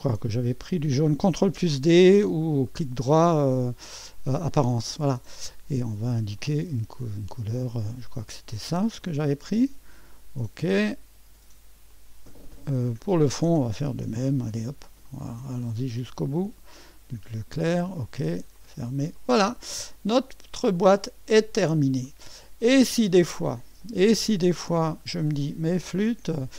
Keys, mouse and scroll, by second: 2.7 right click, 4.5 click, 6.4 click, 8.0 click, 9.0 click, 10.1 click, 11.9 click, 13.0 click, 13.9 ctrl+d, 15.1 click, 16.7 click, 17.7 click, 18.6 click, 19.2 click, 19.9-21.5 drag, 21.5-22.6 scroll up 1, 22.1-23.3 middle drag, 23.1-25.9 scroll up 1.